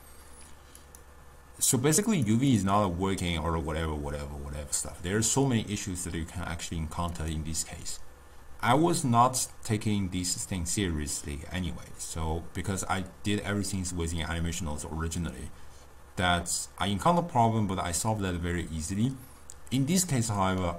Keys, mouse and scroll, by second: 7.2-10.2 drag, 19.8-20.7 drag.